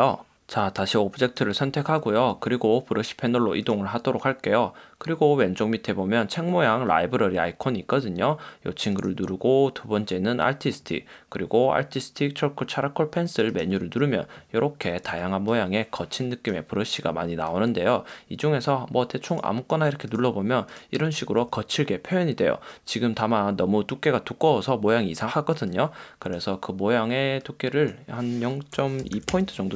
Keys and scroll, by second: 29.0 0, 29.5 Return.